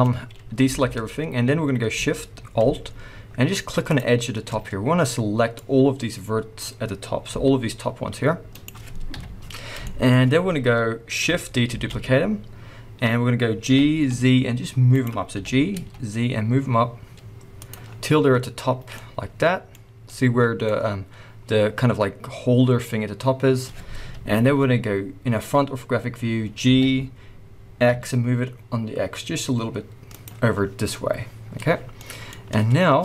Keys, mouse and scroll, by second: 0.1-0.7 scroll down 1, 0.7 alt+a, 1.0-3.0 scroll up 1, 3.0 alt+shift+scroll up 1, 3.9-5.6 alt+shift+drag, 7.3 g, 8.6 right click, 9.1 KP_1, 9.8 shift+middle click, 10.1 scroll up 1, 11.7 shift+d, 15.1 right click, 15.3 g, 17.7 click, 17.8 middle click, 17.8 scroll down 1, 18.3 scroll up 1, 18.9 middle click, 19.5 middle click, 20.6-24.6 middle drag, 24.0 KP_1, 24.6-26.6 scroll up 1, 26.6 g, 30.2 click, 31.9 shift+middle click.